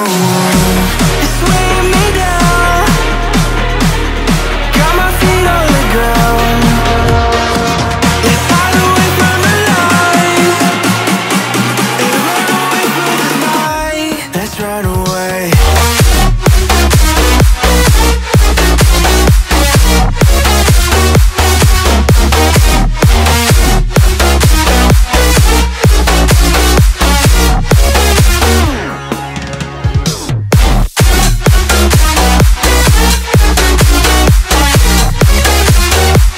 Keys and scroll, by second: 2.1 Return, 6.6 Caps_Lock, 7.5 g, 8.5 -, 9.3 4, 13.9 Return, 25.0 Return, 28.1-32.9 typing, 33.3 ctrl+a.